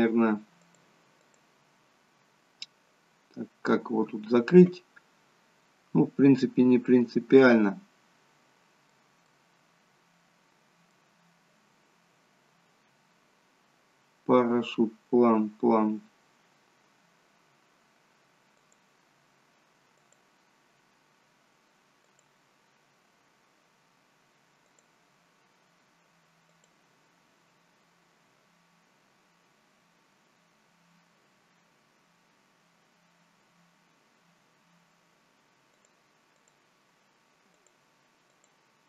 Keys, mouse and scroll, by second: 0.6 click, 1.1 click, 3.3 scroll up 3, 6.8 middle click, 9.2 middle click, 12.1-13.3 scroll down 2, 13.3-14.4 scroll down 1, 15.7-16.7 scroll up 3, 18.5 click, 19.9 click, 22.0 click, 24.6 click, 26.5 click, 31.2 scroll down 3, 33.0 scroll up 3, 35.6 click, 36.4 click, 37.6 click, 38.2 click.